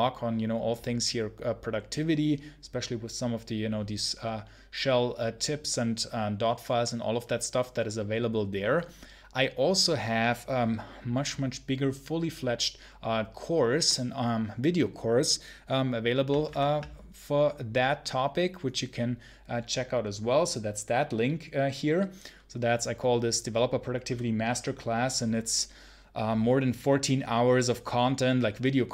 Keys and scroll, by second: 16.3 super+1.